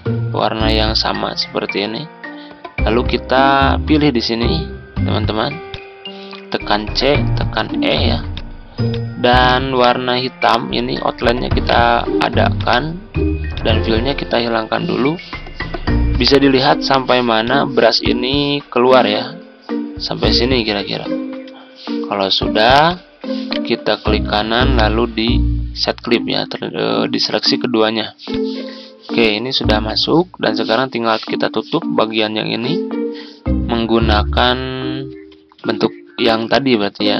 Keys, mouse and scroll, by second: 5.6 shift+click, 6.9-7.7 typing, 8.3 click, 9.6-9.9 ctrl+scroll up 1, 11.6 right click, 12.5 click, 15.5 ctrl+scroll up 1, 17.4-20.5 drag, 20.9-21.3 ctrl+scroll down 1, 22.8 shift+click, 23.5 right click, 28.2 click, 33.5-34.3 scroll down 1, 34.3 click, 34.9-35.2 ctrl+scroll down 1.